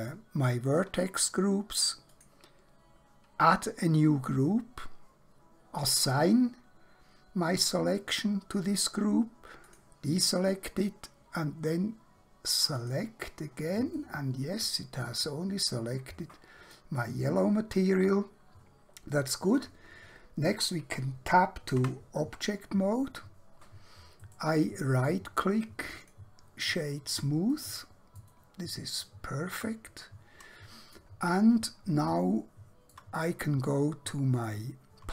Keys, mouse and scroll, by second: 0.0 click, 5.9 click, 9.7 click, 12.7 click, 14.0 middle click, 19.6 click, 21.8 Tab, 24.2 right click, 25.9 click, 27.6 middle click, 32.2 shift+middle click, 34.4 click.